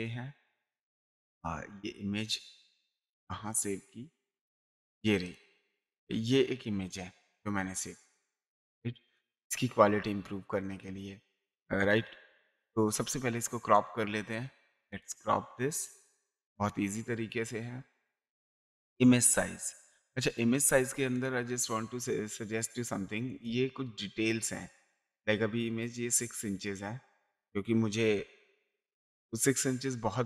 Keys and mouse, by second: 5.2 click, 7.6 space, 8.0 ctrl+click, 9.1 ctrl+space, 9.5 ctrl+click, 10.8 ctrl+space, 11.8 m, 12.5 click, 14.9 click, 16.6 click, 18.7 click, 21.1 click, 23.3 click, 24.6 click, 26.6 click.